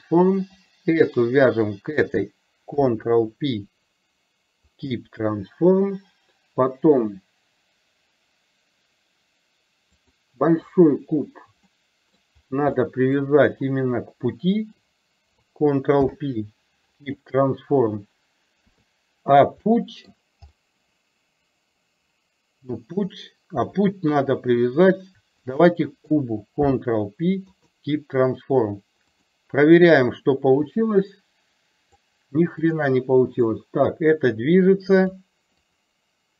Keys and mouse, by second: 0.6 click, 1.5 shift+click, 2.8 ctrl+p, 10.0 click, 11.8-12.2 middle drag, 12.9 middle drag, 16.0 ctrl+p, 18.6 KP_3, 19.6-20.2 middle drag, 20.6 middle click, 22.9 click, 24.2 KP_3, 25.4 click, 26.8 ctrl+p, 29.3 click, 30.9-32.0 drag, 33.6-35.3 drag, 35.6 click.